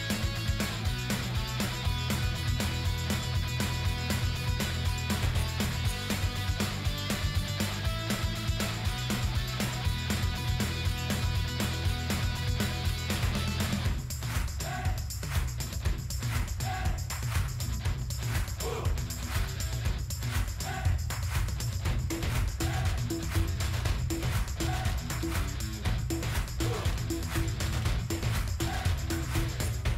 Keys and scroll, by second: 6.5 shift+n, 16.8 ctrl+g, 18.3 shift+f, 19.3-20.2 typing, 26.8 shift+b, 28.0 shift+b, 28.2 shift+s.